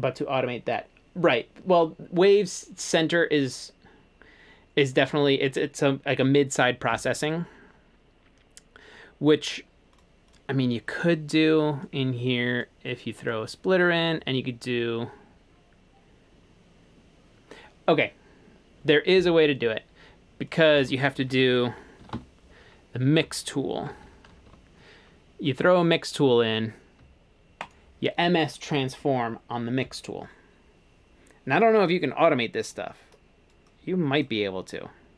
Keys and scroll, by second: 21.8-24.4 typing, 24.5 Return.